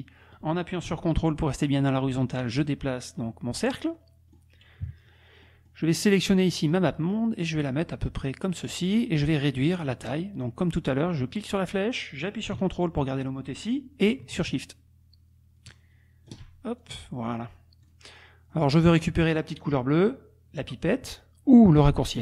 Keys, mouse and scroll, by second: 3.9 click, 4.8 KP_Subtract, 5.4 click, 6.0 click, 6.5-8.9 drag, 11.1-16.5 drag, 16.8 ctrl+shift+click, 17.4-17.8 scroll up 2, 17.8-18.2 scroll down 2, 18.5 click.